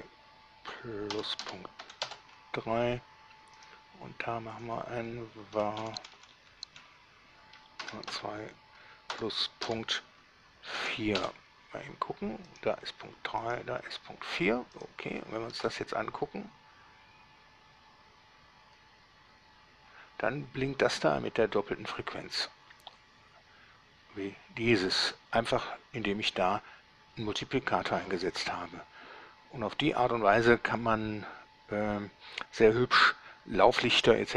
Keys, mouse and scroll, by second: 2.1 ., 2.1 3, 2.3 Return, 3.9 click, 4.8 click, 5.8 Right, 6.1 Left, 6.2 Left, 6.4 Left, 6.5 Left, 6.9 Left, 8.3 shift+2, 9.9 ., 11.1 4, 11.4 Return, 12.7 click, 13.7 click, 15.1 click, 15.4 scroll down 1, 15.8 alt+a.